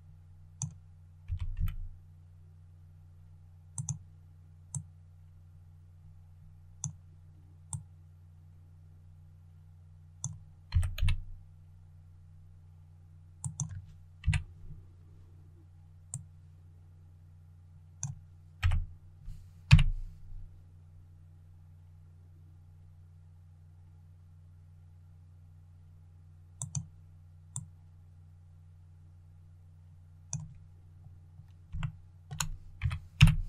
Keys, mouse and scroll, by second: 1.1 typing, 3.6-10.6 drag, 10.6 typing, 13.3 click, 14.1 KP_3, 16.0-17.9 drag, 18.5 typing, 26.5-30.7 drag, 30.7 scroll up 1, 31.7 shift+middle click, 32.7-33.1 typing.